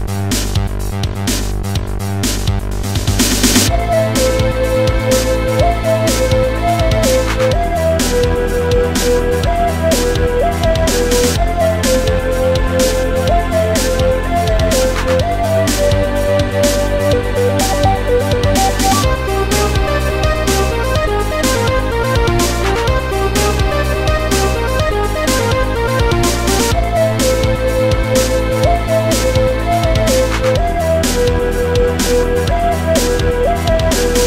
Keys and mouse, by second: 0.2 Return, 1.1 Delete, 2.3 click, 3.4 click, 6.0 click, 6.3 click, 6.7 click, 8.7 click, 9.6 click, 9.8 click, 10.5 ctrl+z, 11.1 click, 12.0 click, 13.1 click, 14.8 click, 22.4 click, 24.7 click, 25.2 click, 27.0 click, 28.1 click, 28.8 click, 30.7 click, 31.9 click, 33.5 click.